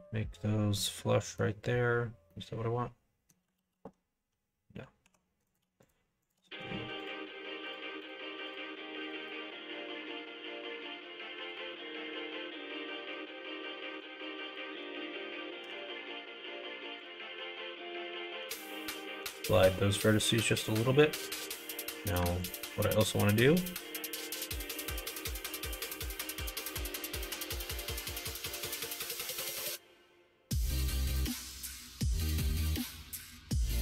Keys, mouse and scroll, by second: 0.7 middle click, 2.2 scroll up 1, 2.4 middle click, 3.5 ctrl+z, 5.0 3, 5.8 shift+click, 6.4 middle click, 7.0 shift+click, 7.6 shift+click, 9.0 shift+click, 9.3 middle click, 9.7 e, 11.7 middle click, 12.7 click, 13.0 3, 13.9 2, 14.5 alt+click, 15.6 g, 17.3 middle click, 18.2 alt+click, 18.5 middle click, 19.2 g, 20.8 middle click, 22.1 click, 22.4 alt+click, 22.8 middle click, 23.3 middle click, 24.4 middle click, 25.3 ctrl+click, 25.6 middle click, 26.5 ctrl+b, 32.1 1, 32.5 click, 32.9 click, 33.5 m.